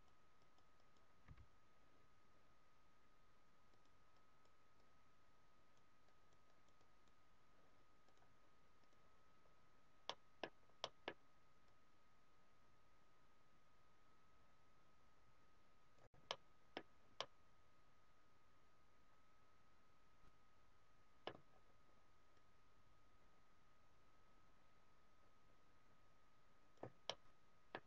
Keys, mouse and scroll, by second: 1.3 s, 2.9 scroll down 1, 3.7-9.3 click, 9.3-9.6 scroll up 3, 10.0 middle click, 10.4 scroll down 2, 10.8 middle click, 11.6 click, 16.2 middle click, 16.6-17.0 scroll down 2, 17.1 middle click, 21.4-22.2 scroll up 3, 22.2 click, 27.1 middle click.